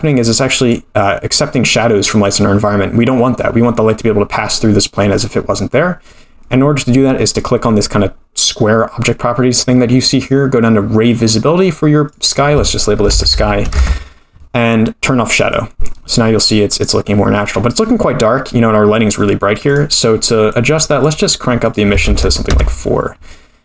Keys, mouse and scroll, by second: 0.6 click, 2.4-3.3 scroll down 4, 3.3-6.4 scroll down 5, 10.1-12.0 scroll down 5, 12.0-14.3 drag, 15.4 click, 19.7 click, 20.5 click, 21.0 click, 21.7 click.